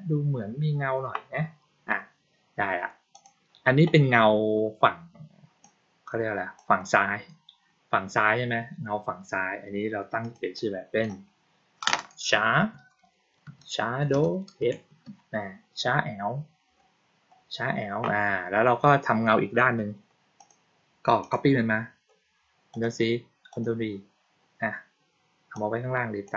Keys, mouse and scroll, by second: 3.0 click, 5.5-6.5 drag, 10.1 click, 10.5 click, 20.3 click, 21.1 click, 22.6 click, 23.4 click, 25.5-26.2 drag.